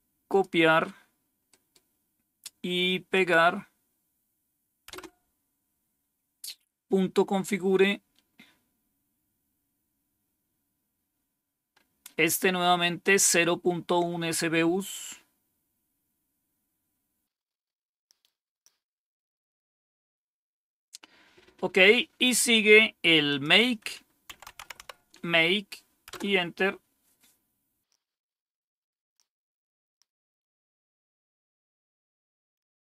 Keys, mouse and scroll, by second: 0.2 click, 1.4 right click, 3.0 click, 4.8 Return, 9.4-10.7 scroll down 1, 14.1-15.2 scroll down 2, 18.3-22.6 scroll down 2, 22.6-23.2 scroll down 1, 23.2 click, 24.0-25.2 typing, 26.0 Return, 31.5 click.